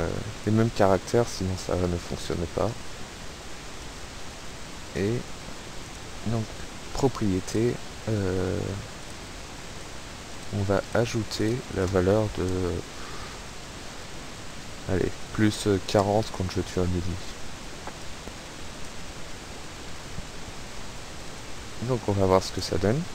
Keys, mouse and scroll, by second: 0.4 click, 2.3-2.7 scroll up 1, 2.8 scroll down 2, 3.8 click, 5.0 click, 5.9 click, 7.5 click, 8.7 click, 9.8 click, 10.4 click, 11.0 click, 11.4 click, 14.9 KP_4, 15.1 KP_0, 15.5 click, 17.2 click, 18.8 click, 19.3 scroll up 1, 21.3 click, 22.1 click.